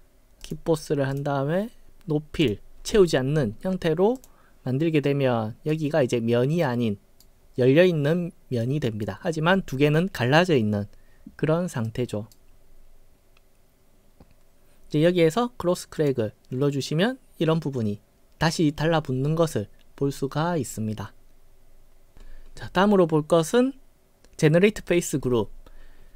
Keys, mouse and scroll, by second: 0.5 click, 2.5 click, 4.2 click, 5.1-5.8 right drag, 6.7-7.3 right drag, 8.7-9.1 right drag, 9.3-9.7 scroll down 7, 11.9-12.4 right drag, 16.0 click.